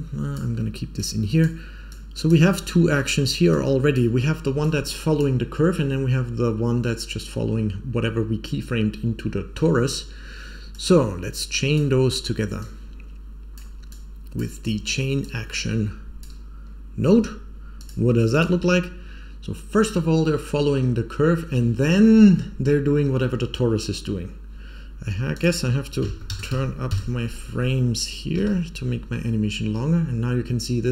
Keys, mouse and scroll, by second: 0.9-1.3 drag, 1.8-2.3 drag, 2.6 scroll down 2, 2.9 middle click, 3.4-3.9 drag, 4.5-5.1 drag, 10.7-11.7 drag, 12.5-13.5 drag, 13.8-14.3 drag, 15.1-16.2 drag, 17.7 click, 18.2 click, 25.3 click, 26.2 click, 28.3 Home.